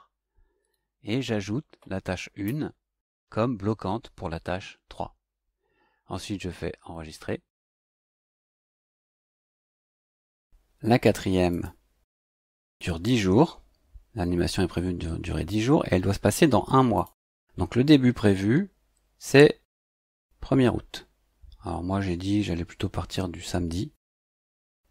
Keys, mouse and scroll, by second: 0.6 click, 2.0 click, 6.8 click, 8.3 click, 9.2 click, 11.5 click, 16.9 click, 23.9 click.